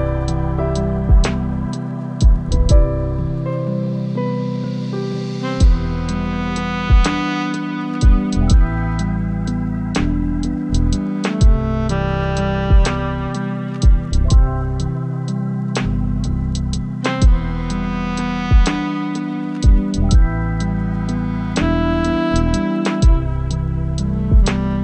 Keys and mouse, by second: 1.8-3.8 drag, 6.0-8.2 drag, 9.6 Tab, 11.2 a, 11.5 s, 12.8 Tab, 14.0-14.5 middle drag, 15.2 g, 15.5 y, 17.2 click, 19.5 Tab, 20.6 a, 20.8 s, 22.7 Tab.